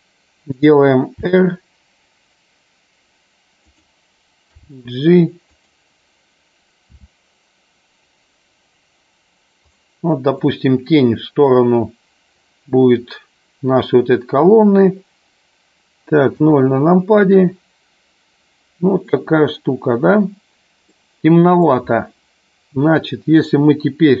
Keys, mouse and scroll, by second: 3.8 click, 5.7 click, 6.9 r, 9.8 click, 10.6-11.7 middle drag, 16.5 KP_0, 21.1-22.0 middle drag.